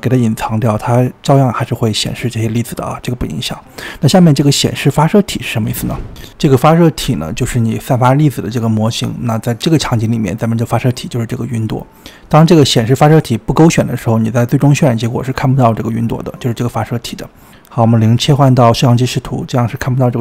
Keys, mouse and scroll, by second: 2.8 click, 4.2 click, 12.1-12.8 scroll down 4, 15.5 click, 16.2 middle click, 16.9 KP_0, 18.1-18.9 scroll down 2, 18.9-19.3 middle drag, 19.3-20.0 scroll down 5, 20.0-20.2 middle drag.